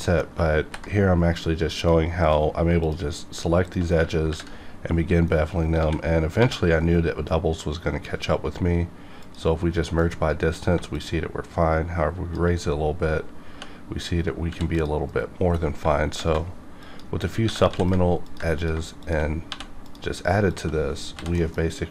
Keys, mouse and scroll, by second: 0.0 middle click, 0.6 ctrl+b, 1.8 click, 2.8 shift+click, 4.2 ctrl+b, 5.3 right click, 5.8-6.4 typing, 6.8 right click, 9.2 click, 10.0 F9, 10.9-13.4 shift+drag, 13.4 2, 14.5 ctrl+r, 14.7 ctrl+click, 15.1 right click, 16.0 ctrl+shift+Tab, 16.8 ctrl+click, 17.4 ctrl+g, 17.7 ctrl+z, 18.2 click, 18.6 click, 19.0 shift+click, 19.5 1, 19.8 click, 20.5 shift+click, 21.1 j, 21.4 middle click.